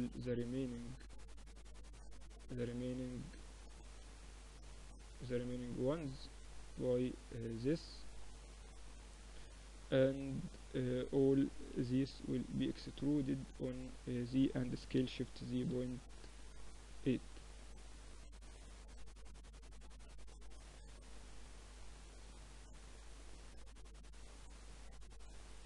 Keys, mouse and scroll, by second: 3.4 shift+right click, 3.5 middle click, 4.9 click, 5.1-6.9 drag, 6.9-10.7 middle drag, 10.7 click, 10.7 e, 11.7 middle click, 13.8 s, 15.7 Tab, 19.1 KP_Divide, 20.3-21.8 middle drag.